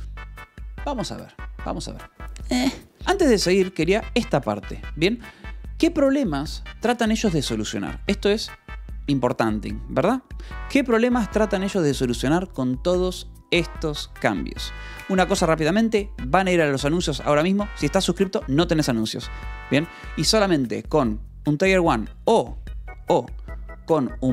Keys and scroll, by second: 3.5 j, 5.1 Escape.